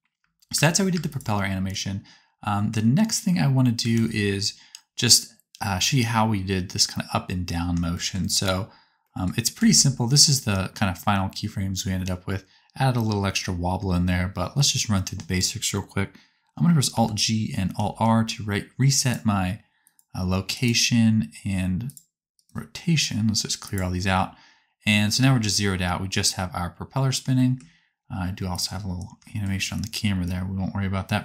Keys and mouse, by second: 0.1 space, 0.5 space, 0.9 space, 1.1 click, 3.9 ctrl+s, 9.5 a, 16.8 alt+g, 17.8 alt+r, 25.1 space.